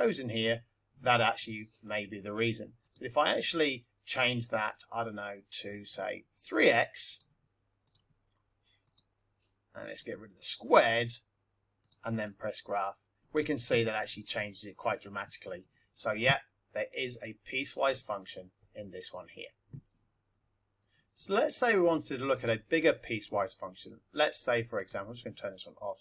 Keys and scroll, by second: 2.8 Right, 7.0 3, 7.8 x, 8.8 Right, 9.8 Delete, 17.5 F1, 24.8 Left.